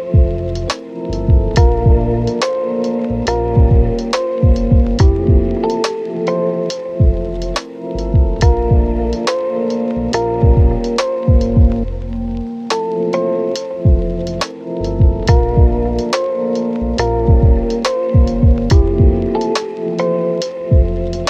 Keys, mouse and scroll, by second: 0.3 ctrl+shift+click, 1.1 Tab, 1.6 click, 2.4 scroll down 1, 2.5 scroll up 1, 2.6 Tab, 3.2 right click, 3.4 ctrl+shift+click, 4.0 ctrl+shift+click, 4.4 Tab, 4.4 scroll up 2, 4.4 right click, 4.6 ctrl+shift+click, 4.9 ctrl+shift+click, 5.4 scroll down 1, 5.4 Tab, 5.5 right click, 5.5 scroll up 1, 5.6 ctrl+shift+click, 5.8 BackSpace, 6.1 Return, 6.4 click, 6.5-7.4 scroll up 3, 6.5 ctrl+shift+click, 6.9 right click, 7.0 ctrl+shift+click, 7.0 right click, 7.2 click, 7.4 ctrl+shift+click, 7.8 ctrl+shift+click, 8.0 scroll down 1, 8.1 scroll up 1, 8.1 right click, 8.2 scroll down 1, 8.3 scroll up 2, 8.3 Tab, 8.4 Tab, 8.5 ctrl+click, 8.6 click, 8.7 scroll down 1, 8.7 scroll up 1, 8.8 ctrl+shift+click, 9.2 scroll down 1, 9.2 scroll up 1, 9.3 ctrl+shift+click, 9.7 scroll down 1, 9.7 scroll up 2, 9.7 right click, 9.8 Tab, 9.9 right click, 10.0 Tab, 10.0 scroll down 1, 10.1 scroll up 1, 10.1 right click, 10.2 scroll down 1, 10.2 right click, 10.3 scroll up 1, 10.4 ctrl+shift+click, 11.5 scroll down 1, 11.6-11.9 scroll up 1, 12.0 ctrl+shift+click, 12.3 scroll down 1, 12.5-13.2 scroll up 2, 12.6 right click, 13.2 Tab, 13.4 scroll down 1, 13.7 right click, 13.9 click, 14.1 scroll up 1, 14.2 Tab, 14.6 scroll down 1, 14.7 scroll up 1, 15.0 scroll down 1, 15.3 click, 15.8 scroll down 1, 15.9-16.3 scroll up 1, 16.3 click, 17.2 right click, 17.4-18.1 scroll down 1, 18.1-18.7 scroll up 2, 18.2 right click, 18.7 right click, 19.2 click, 20.1 scroll down 1, 20.2 right click, 20.9 scroll up 1, 21.0 right click, 21.2 scroll down 1.